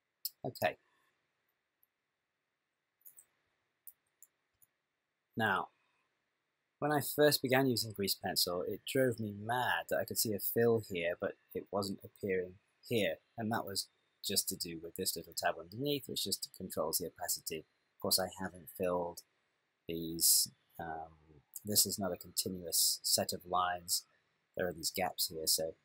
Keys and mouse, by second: 3.9 t, 4.6 n, 15.1 click.